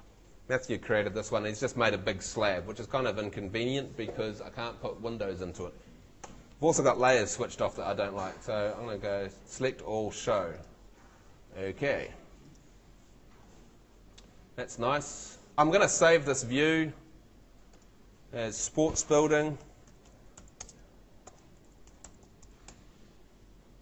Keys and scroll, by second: 6.3 shift+Home, 6.9 shift+super+Home, 7.1 shift+super+l, 18.9-23.3 typing.